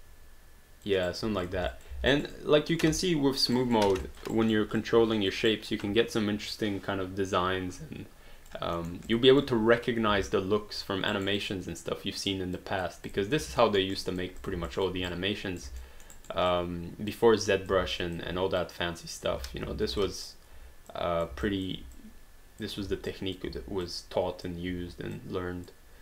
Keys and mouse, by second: 1.1 alt+right click, 1.5 click, 1.8 alt+click, 1.9 alt+d, 2.2 alt+right click, 2.4 alt+click, 3.7 alt+right click, 4.0 alt+click, 4.3 alt+right click, 4.8 alt+click, 5.5 alt+right click, 5.9 alt+click, 8.8 alt+middle click, 9.1 alt+click, 10.3 alt+click, 11.2 alt+right click, 11.4 alt+click, 12.6 alt+click, 13.1 click, 13.7 alt+middle click, 14.0 alt+click, 14.5 click, 14.7 alt+click, 15.1 right click, 15.8 alt+middle click, 16.2 alt+right click, 16.5 alt+click, 17.5 click, 18.0 alt+click, 18.6 click, 20.2 alt+click, 20.9 click, 21.4 alt+click, 21.9 click, 22.8 q, 23.1 click, 23.5 w, 23.9 click, 24.7 w, 25.2 click.